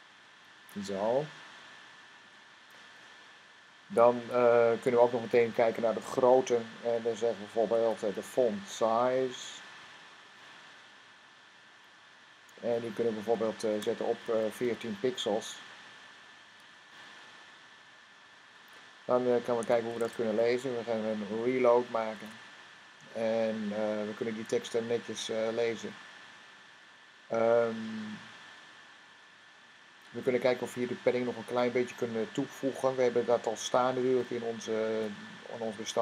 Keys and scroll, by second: 4.6 typing, 7.9-8.8 typing, 11.0 Down, 14.1 typing, 15.8-16.9 typing, 18.0 typing, 19.4 typing, 19.8 Tab, 21.9 r, 33.8 Tab.